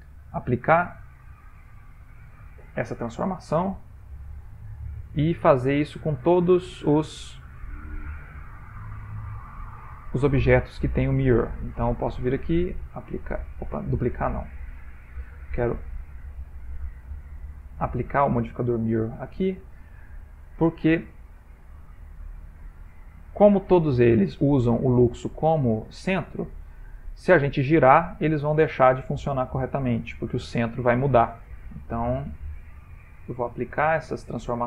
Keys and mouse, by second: 3.9 click, 5.8 click, 8.0 middle click, 9.2 click, 11.7 click, 13.5 click, 14.9 click, 16.2 click, 17.0 click, 19.7 click, 22.0 click, 25.5 middle click, 25.6 middle click, 25.7 middle click, 26.5 click, 29.5 click, 32.0 click, 34.1 shift+middle click.